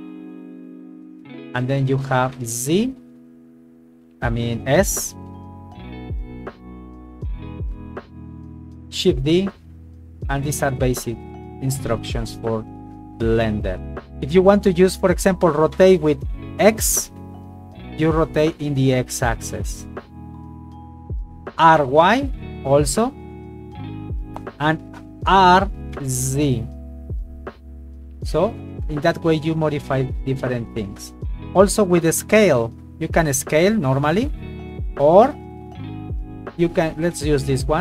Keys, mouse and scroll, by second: 0.6 click, 2.4 z, 4.8 s, 8.2 click, 9.2 shift+d, 9.8 click, 11.8 right click, 12.5 g, 13.1 click, 15.8 r, 17.0 x, 20.4 click, 21.7 r, 22.1 y, 24.3 click, 25.3 r, 26.0 z, 31.1 click, 32.2 s, 35.6 click, 36.9 right click, 37.3 g.